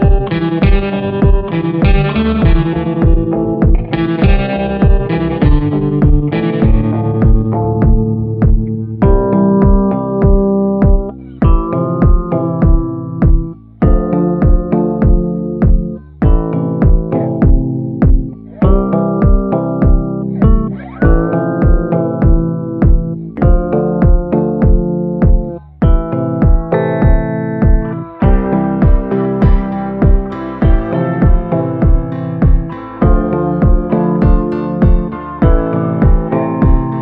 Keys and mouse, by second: 1.7 click, 2.6-4.3 drag, 4.7 a, 5.2 middle click, 6.8 shift+middle click, 7.4-9.0 middle drag, 9.5 shift+middle click, 10.0-12.2 shift+middle drag, 12.4 shift+middle click, 16.5 ctrl+i, 16.9 b, 18.2-20.4 typing, 21.6 middle click, 22.0 middle click, 22.3 middle click, 22.8 shift+middle click, 23.8-26.0 typing, 27.5 middle click, 28.5 b, 29.6-30.7 middle drag, 30.7 click, 32.1-34.6 right drag, 35.3 shift+middle click, 35.6 middle click, 36.0 shift+middle click, 36.4 shift+middle click, 36.9 shift+middle click.